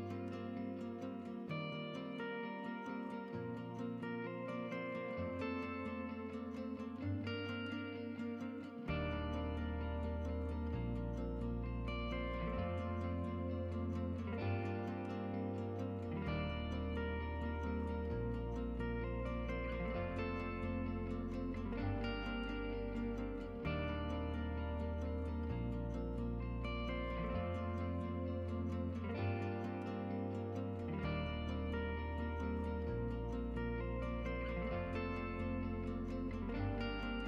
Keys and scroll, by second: 7.0 Tab, 18.2-19.4 typing, 29.1-30.8 typing, 35.7 4.